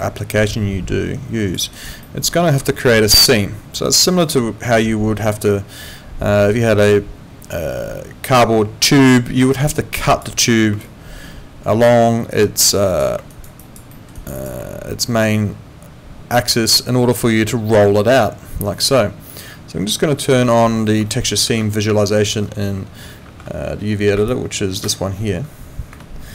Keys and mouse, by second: 1.7 alt+right click, 2.0 alt+middle click, 4.0 alt+right click, 4.3 alt+click, 10.8 alt+click, 13.3 alt+right click, 13.6 alt+click, 13.9 alt+middle click, 14.1 alt+right click, 14.4 alt+click, 21.4 ctrl+4.